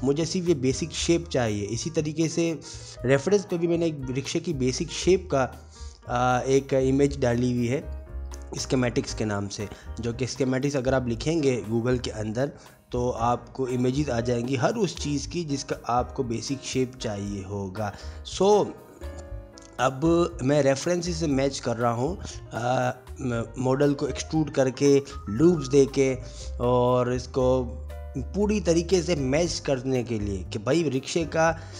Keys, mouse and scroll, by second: 0.0 shift+middle click, 0.3 Tab, 0.7 Tab, 0.7 middle click, 0.9 shift+middle click, 1.9 middle click, 2.2 click, 2.4 middle click, 2.7 Tab, 3.1 middle click, 3.4 Tab, 3.5 Tab, 4.5 e, 4.7 middle click, 5.0 Escape, 5.1 click, 6.0 middle click, 10.6 click, 11.1 ctrl+z, 11.2 ctrl+z, 14.0 middle click, 14.0 ctrl+z, 14.1 ctrl+z, 14.2 Tab, 14.3 Tab, 14.7 click, 15.4 g, 16.8 click, 17.1 Tab, 17.5 alt+z, 17.5 click, 18.0 middle click, 18.3 click, 18.6 click, 18.9 g, 20.9 click, 23.1 middle click, 23.1 click, 24.2 alt+z, 24.2 ctrl+r, 25.5 alt+3, 25.5 alt+click, 25.9 alt+click, 25.9-28.0 typing, 27.3 click, 27.6 middle click, 27.8 click, 28.7 alt+click, 28.9 alt+shift+click, 30.9 g, 31.3 middle click.